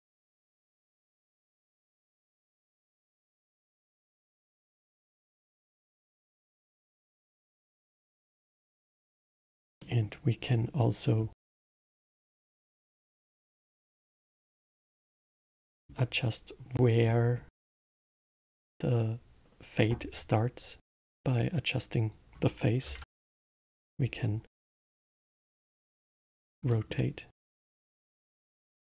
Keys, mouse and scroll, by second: 1.1-1.7 scroll down 2, 1.7 click, 2.4-3.0 middle drag, 3.0-3.5 scroll down 2, 3.5-4.3 scroll up 2, 4.3 click, 5.0-6.7 middle drag, 6.7 click, 9.8-11.1 middle drag, 11.1-11.5 scroll down 1, 12.1-12.9 middle drag, 12.9-15.5 drag, 15.5-17.0 middle drag, 17.0-17.8 scroll up 2, 17.8-20.9 middle drag, 21.9-24.7 drag, 24.7 scroll down 1, 25.2-28.6 middle drag, 28.6-28.8 drag.